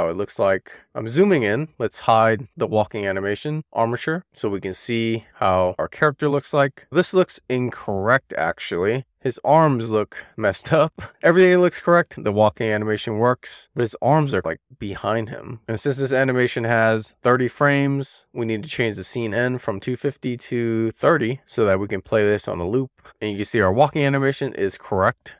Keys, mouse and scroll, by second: 1.9 click, 3.4-3.9 scroll up 1, 3.9 scroll up 1, 4.1-4.6 scroll down 1, 4.6-6.6 middle drag, 8.1 click, 10.0 click, 14.2 click, 18.5-21.3 drag, 23.2 click.